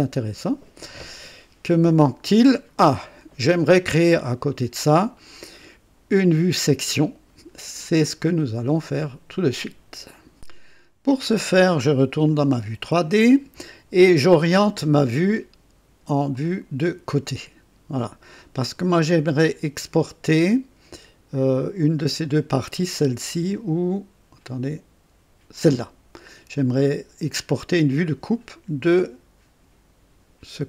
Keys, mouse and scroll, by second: 1.6 scroll down 1, 10.3 click, 12.2 click, 16.3 click, 28.8 click.